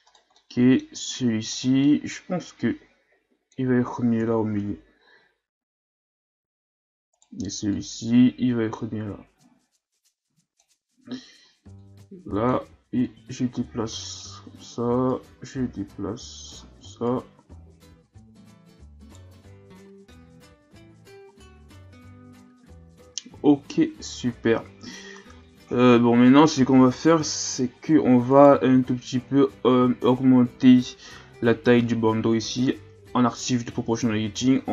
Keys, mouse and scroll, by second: 0.1 right click, 0.3-0.9 middle drag, 0.9 Tab, 1.5 right click, 1.8 middle click, 2.6-4.2 drag, 4.2 KP_1, 5.5 Tab, 6.4 Tab, 7.1 right click, 7.7-10.7 drag, 11.8 click, 13.0-15.1 drag, 15.1 right click, 17.1 right click, 19.4 Tab, 19.8 a, 20.3-22.2 scroll down 4, 22.2 shift+scroll down 2, 23.9-24.4 scroll up 4, 27.1 KP_3, 28.3 right click, 28.7 Tab, 29.0-29.7 scroll up 3, 32.9 o, 34.3 g.